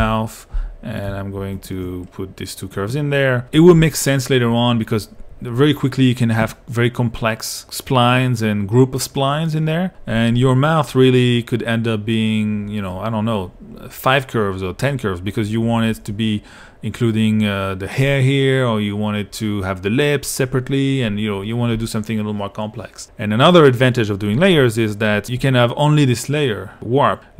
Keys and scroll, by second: 0.0-0.3 typing.